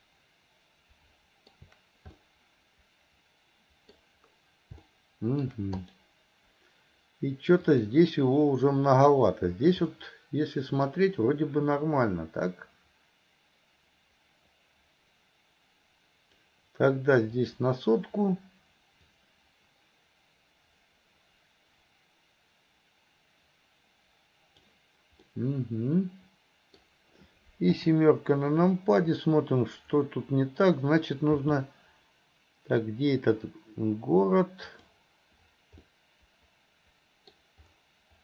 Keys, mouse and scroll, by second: 2.3-4.1 middle drag, 5.0-5.6 shift+middle drag, 5.9 click.